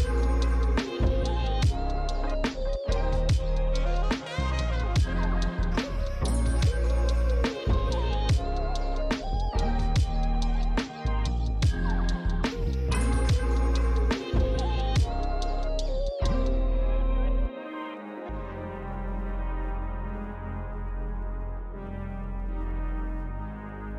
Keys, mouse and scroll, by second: 1.6 click, 7.5 click, 13.8 click, 19.0 click.